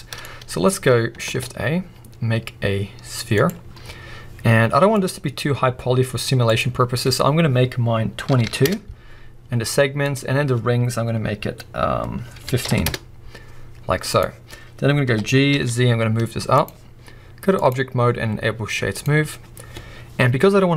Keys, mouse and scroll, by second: 1.2 shift+a, 4.9-16.6 drag, 8.4 2, 8.6 Return, 12.9 Return, 15.1 g, 17.5-20.7 drag.